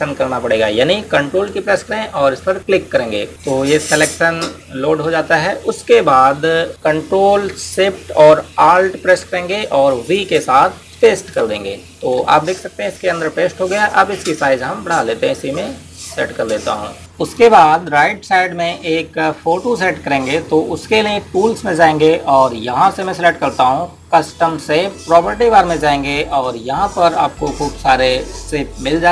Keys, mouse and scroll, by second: 3.3 click, 11.8 ctrl+alt+shift+v, 14.1 click, 21.1 click.